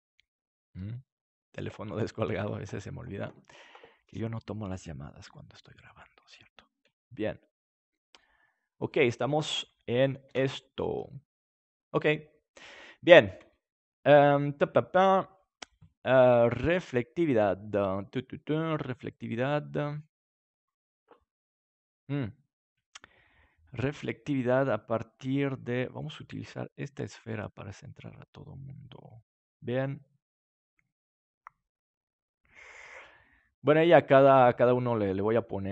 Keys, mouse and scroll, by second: 5.2 r, 6.8-8.0 drag, 6.8 g, 8.6-10.4 drag, 10.2 ctrl+s, 12.3 middle click, 12.8-14.7 drag, 16.8-18.8 drag, 25.9-28.9 drag, 32.0 right click, 33.3 middle click, 33.8-35.6 drag.